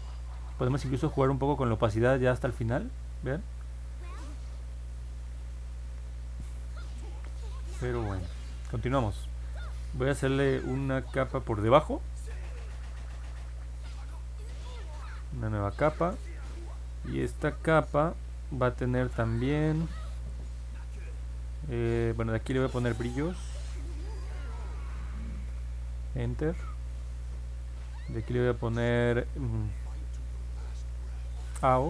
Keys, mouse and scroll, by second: 1.9-5.7 drag, 22.7 click, 24.4 r, 25.4 s, 28.2 click, 31.2 a, 31.6 o.